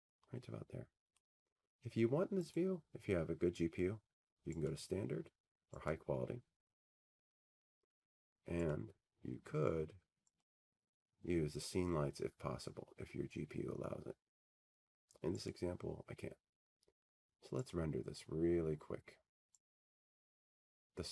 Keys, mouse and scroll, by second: 2.2 click, 6.7 click, 8.2 right click, 10.4 click, 11.4 click, 14.3 click, 16.0 click.